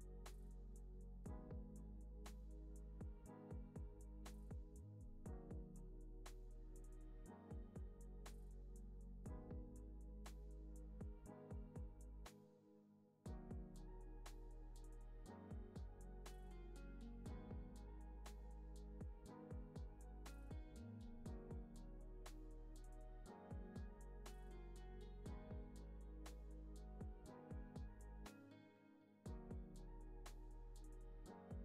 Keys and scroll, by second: 5.5 z, 8.5 space, 9.6 super+=, 24.7 alt+x, 28.3 alt+z.